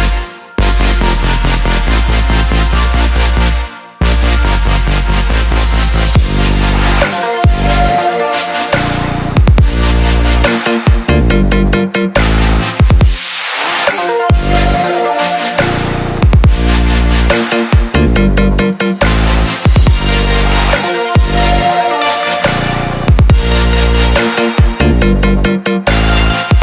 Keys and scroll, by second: 2.3 ctrl+j.